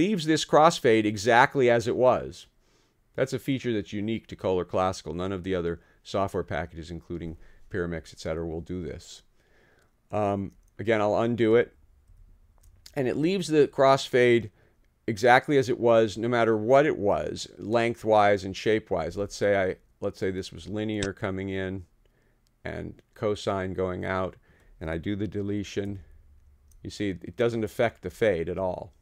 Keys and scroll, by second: 12.1 super+z, 25.9 super+BackSpace.